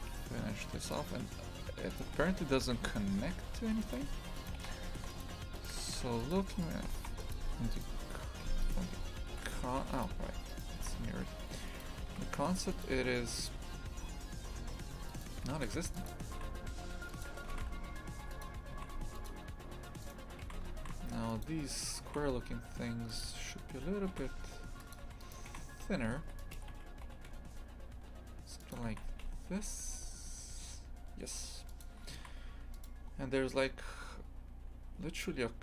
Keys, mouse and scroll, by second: 2.0 click, 2.2 shift+f, 4.4 right click, 4.6 shift+f, 6.6 shift+right click, 7.3 click, 7.5 a, 7.7 right click, 8.6 right click, 9.3 shift+f, 10.5 right click, 10.8 shift+f, 12.1 shift+f, 14.5 3, 15.1 right click, 16.1 Delete, 16.4 shift+f, 17.3 2, 17.5 shift+f, 18.7 shift+f, 20.0 right click, 20.4 shift+f, 22.0 shift+f, 24.1 shift+f, 25.0 3, 25.2 right click, 25.5 shift+f, 26.5 g, 28.9 shift+f, 32.1 shift+f.